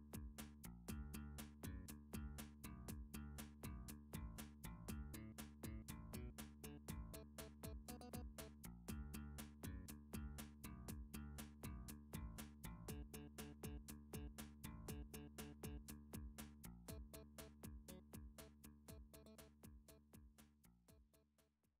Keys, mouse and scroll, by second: 0.6 middle click, 0.7 middle click, 0.7-1.1 scroll up 3, 1.5 scroll down 3, 1.9 scroll, 3.4 middle click, 3.6-4.0 scroll, 4.1 shift+middle click, 4.2-5.4 scroll down 3, 5.5 scroll down 1, 17.0 middle click, 20.0 middle click, 21.4 middle click.